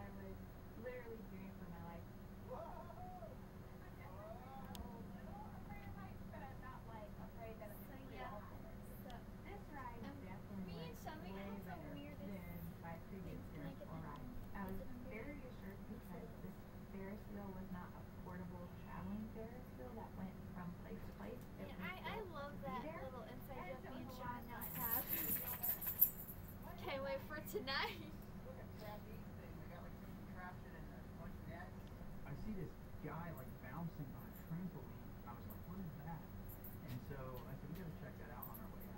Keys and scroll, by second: 29.1 Delete, 29.7 BackSpace.